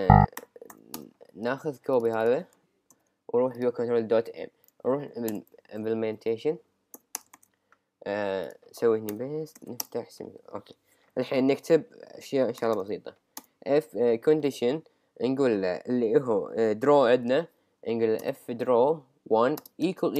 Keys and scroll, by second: 1.0 Return, 2.9 super+c, 6.0 Up, 7.2 Return, 7.3 super+v, 9.8 Return, 13.4 Return, 18.2 Return.